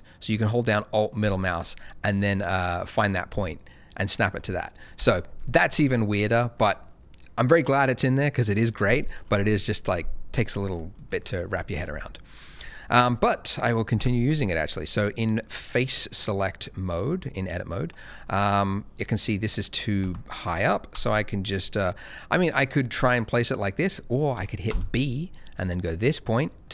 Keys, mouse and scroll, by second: 3.4 alt+middle click, 4.9 Escape, 9.4 middle click, 9.8-10.5 scroll up 1, 10.5 middle click, 11.6 shift+middle click, 11.8-12.4 shift+scroll down 1, 12.4 middle click, 13.9 Tab, 14.4 click, 17.8 middle click, 20.0 g, 20.9 z, 24.6 b, 25.6 click.